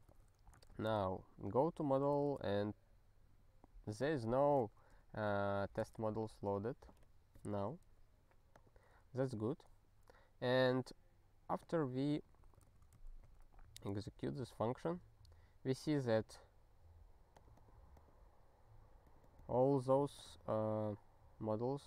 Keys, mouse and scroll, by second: 0.1 alt+x, 0.7 Return, 6.3 ctrl+g, 8.5 click, 11.6 click, 12.2 ctrl+n, 12.4 ctrl+e, 13.0 ctrl+n, 13.3 ctrl+e, 13.9 ctrl+e, 21.6 click.